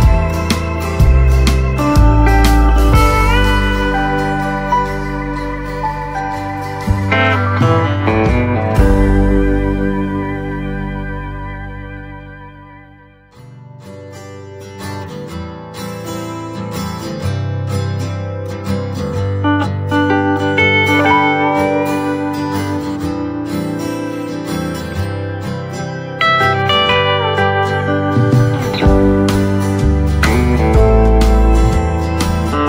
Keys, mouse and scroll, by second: 7.5-8.1 scroll up 1, 8.7 scroll up 1, 8.8-11.6 drag, 11.6-12.1 scroll down 1, 14.8 click, 17.4-19.5 right drag, 19.5 click, 20.5 right click, 21.4-25.3 drag, 25.3-29.3 right drag, 29.3 click.